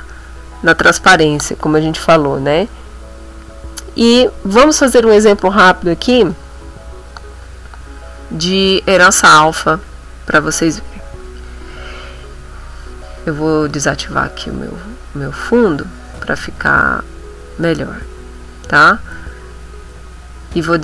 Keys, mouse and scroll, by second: 0.9 click, 9.5 click, 13.7 click, 15.7 click, 16.2 click, 17.7 click, 19.6 click.